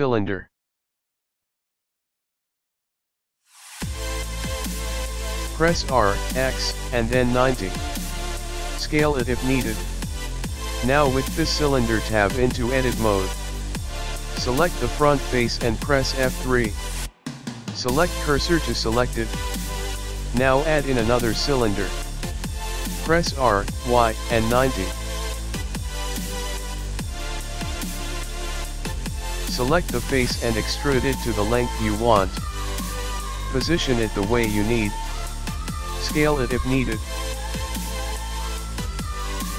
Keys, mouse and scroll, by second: 1.7 shift+a, 5.3 r, 11.3 Tab, 11.8 middle click, 14.8 KP_1, 15.9 Tab, 16.1 Tab, 16.8 click, 16.9 click, 17.2 click, 17.7-18.0 scroll up 4, 20.3 F3, 20.4 shift+a, 23.5 r, 26.7 middle click, 28.8 click, 30.2-31.1 scroll down 5, 30.2 r, 31.4 KP_1, 32.9 e, 35.7 e, 37.4-37.9 scroll up 1, 37.9 middle click, 37.9-38.5 scroll up 1.